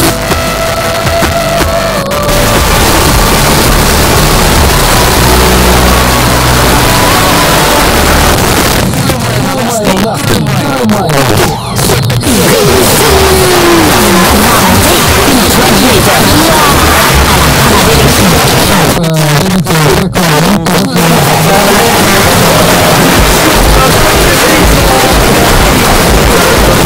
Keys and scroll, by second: 8.3 Page_Down, 18.4 Page_Down, 26.8 space.